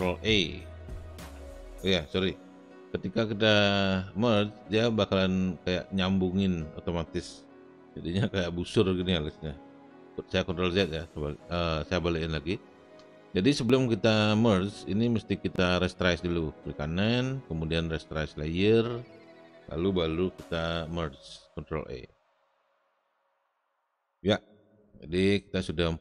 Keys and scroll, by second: 0.2 ctrl+e, 9.6 ctrl+z, 20.8 ctrl+e.